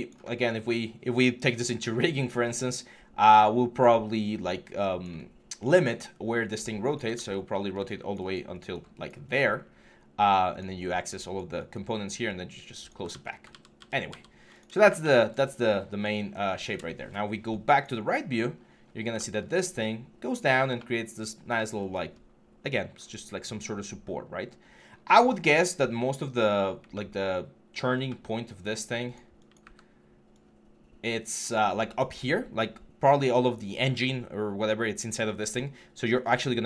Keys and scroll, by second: 6.9 ctrl+z, 12.9 ctrl+z, 13.3 ctrl+z, 29.4 w.